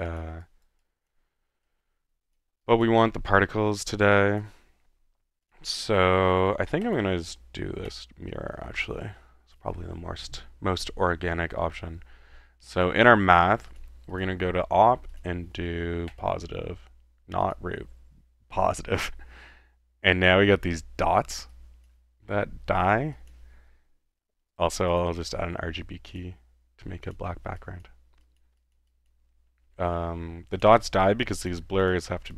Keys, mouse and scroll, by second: 0.4-2.6 drag, 2.9 click, 4.2 click, 4.7 middle click, 5.5-6.5 drag, 7.0 click, 7.9 click, 12.8 click, 13.7 click, 14.1 click, 15.1 click, 16.1 click, 17.4 click, 18.6 click, 21.5-22.0 drag, 22.2-22.7 middle drag, 23.1-23.4 drag, 24.5 right click, 24.9 click, 24.9-26.2 typing, 26.1 drag, 27.1 click, 27.6-28.0 drag, 28.2 drag, 28.8 click, 28.9 drag, 30.5-31.4 drag, 31.6 drag, 32.0 click.